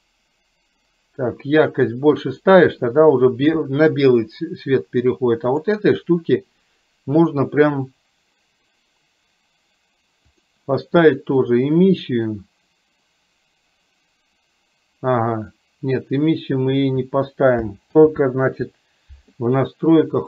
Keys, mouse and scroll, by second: 10.6-12.1 drag, 18.1 ctrl+z.